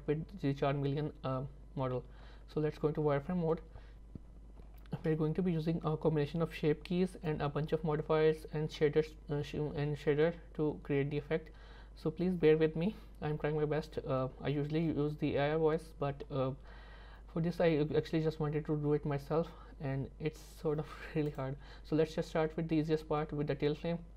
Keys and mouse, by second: 2.3 z, 5.1 middle click, 21.3 click.